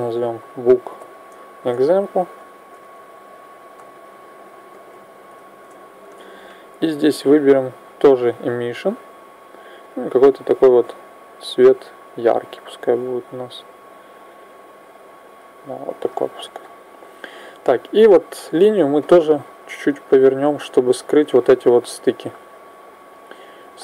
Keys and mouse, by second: 0.3 o, 7.3-11.7 drag, 18.3 right click, 20.0-21.9 drag, 22.8 click.